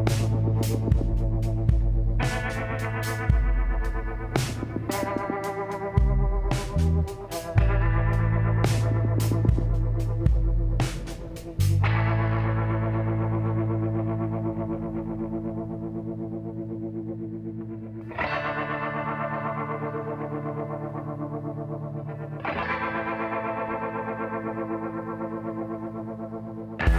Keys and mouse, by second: 0.3 click, 1.0 KP_1, 1.4 click, 4.7 l, 5.8 KP_3, 6.9 z, 7.5 b, 11.3 l, 13.8 z, 18.4 shift+l, 24.6 shift+d, 26.1 p.